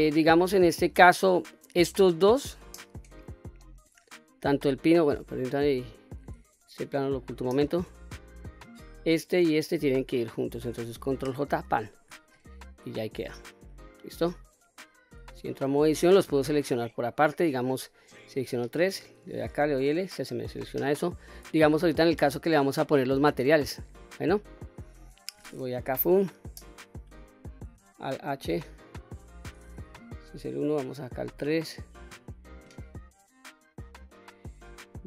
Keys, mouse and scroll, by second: 1.4 click, 3.2-4.6 middle drag, 5.1 click, 6.5 h, 7.3-8.0 middle drag, 8.4 click, 9.4 shift+click, 11.1 ctrl+j, 12.8-13.2 middle drag, 13.7 middle click, 14.8 Tab, 15.3-15.8 scroll up 2, 15.8 scroll down 1, 16.2-16.8 middle drag, 17.7 3, 18.4 click, 19.3 l, 21.3 Tab, 21.9-22.3 middle drag, 22.6-23.2 scroll down 1, 23.2 scroll up 2, 23.6-24.2 scroll down 2, 24.2-24.6 middle drag, 25.4 KP_1, 27.8 alt+h, 29.5 KP_1, 30.3 KP_3, 32.5-33.6 middle drag, 34.4-35.0 drag.